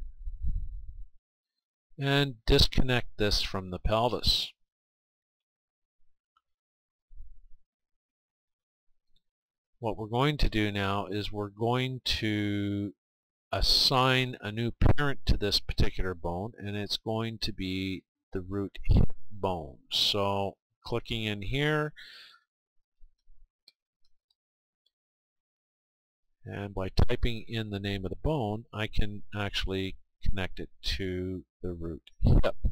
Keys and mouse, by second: 1.2 Tab, 4.8-6.7 drag, 7.7-9.7 right drag, 11.6-13.6 right drag, 14.0-15.9 right drag, 17.9-19.7 drag, 22.8 o, 32.0-32.7 right drag.